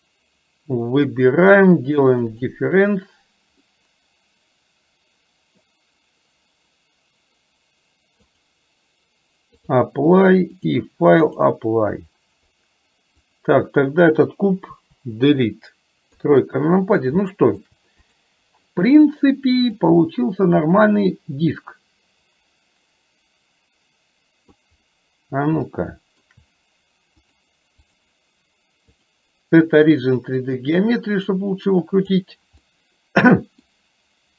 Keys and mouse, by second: 2.3 click, 3.8-5.7 middle drag, 8.4-10.1 drag, 10.8 click, 13.3 click, 14.8 Delete, 16.2 KP_3, 17.3 middle click, 18.2 click, 20.1-24.7 drag, 25.8 shift+middle click, 27.4-29.3 drag, 30.6 click, 31.2-32.2 drag, 32.7-33.8 middle drag.